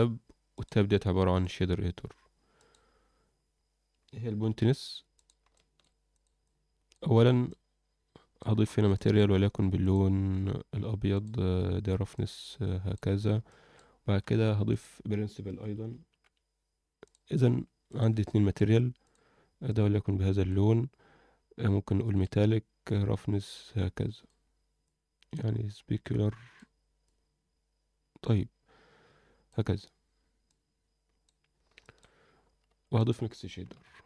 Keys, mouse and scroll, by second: 0.5-1.5 drag, 2.5 click, 3.5 scroll down 1, 4.3 n, 5.1 click, 5.5 alt+shift+middle click, 6.1 click, 7.5-8.4 drag, 8.6 scroll up 1, 8.9 alt+shift+middle click, 9.3-9.8 scroll up 2, 9.8 click, 11.1 drag, 12.1-12.9 drag, 13.1 scroll down 1, 13.5 alt+shift+middle click, 14.2 shift+a, 18.2 shift+middle click, 19.0 click, 21.8 click, 22.8-24.3 drag, 24.8-26.5 drag, 27.0-29.4 drag, 30.4-31.2 drag, 31.5 scroll down 1, 31.8 shift+middle click, 32.4 scroll down 1, 32.6 shift+a.